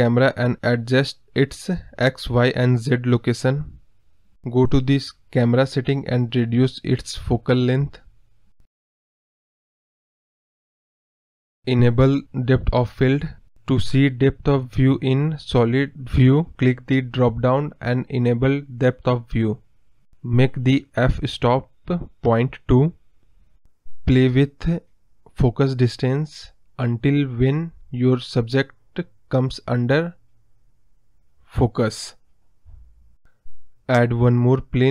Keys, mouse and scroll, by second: 0.4-8.9 drag, 9.1 scroll up 2, 10.1-11.0 scroll up 1, 11.0-11.5 scroll down 2, 14.7 click, 16.9-19.2 drag, 20.7-22.8 drag, 22.8-23.8 scroll up 4, 23.8 scroll down 3, 24.1-25.4 scroll up 1, 25.4-31.9 drag, 32.2-32.9 scroll up 7, 32.9-34.4 scroll down 6, 34.4-34.8 scroll down 2.